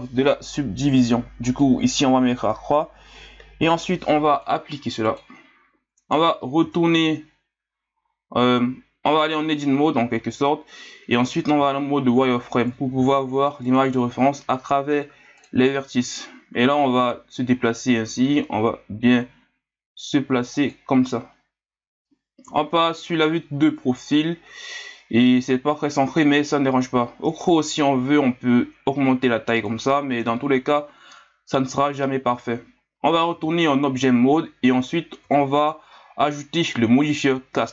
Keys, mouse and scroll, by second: 1.5-5.9 drag, 5.9-6.6 scroll up 1, 6.6 Tab, 8.2-10.4 scroll down 1, 11.5 z, 12.2 scroll up 2, 12.9 s, 13.9 scroll up 4, 15.4-18.2 drag, 18.2 s, 21.1-22.4 scroll up 2, 22.4 KP_3, 27.8 s, 30.2 KP_1, 33.3 Tab, 35.2 z.